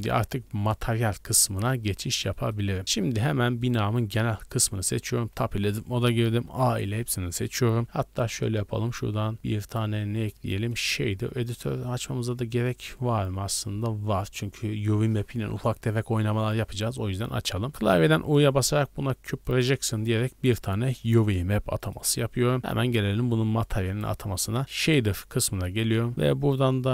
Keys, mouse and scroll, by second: 0.6-1.2 scroll up 4, 1.5 shift+middle click, 1.8 drag, 1.9 middle click, 2.0-2.3 scroll up 1, 2.3-2.9 shift+middle drag, 2.8-3.6 scroll down 4, 3.6 right click, 4.8 Tab, 5.3 a, 8.4 click, 9.6-11.3 drag, 11.3 n, 13.8-16.7 scroll up 3, 16.7-17.4 scroll up 1, 17.5 scroll up 2, 18.0 u, 21.0-21.9 middle drag, 22.0 Tab, 23.6 click, 24.7 click, 25.6 click.